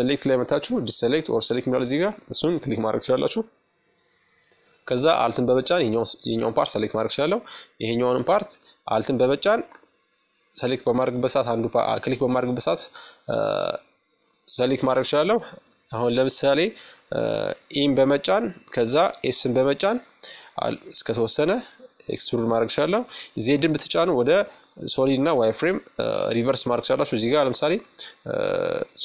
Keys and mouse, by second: 2.7-4.4 right drag, 3.7-5.6 middle drag, 7.2-8.9 right drag, 8.0-9.8 middle drag, 10.5-12.2 middle drag, 12.2 KP_1, 13.7 middle click, 15.3 e, 21.1 z, 22.6 z, 23.0 z, 25.8 z, 27.8-29.0 drag.